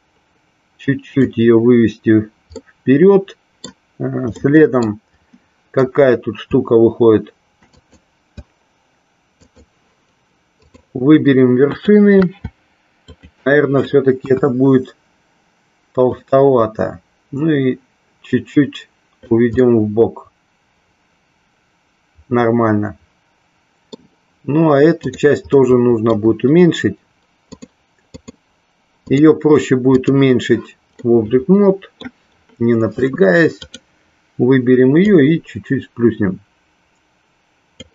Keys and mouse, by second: 2.7-3.9 middle drag, 4.5 middle click, 7.9 click, 9.6 shift+click, 10.7 shift+click, 11.7 shift+click, 13.1 shift+click, 14.4 KP_1, 16.2-19.5 drag, 19.9-24.1 middle drag, 25.1 click, 25.7 middle click, 27.9 click, 29.4-30.4 drag, 31.2-32.2 middle drag, 33.7 click, 35.4-37.9 drag.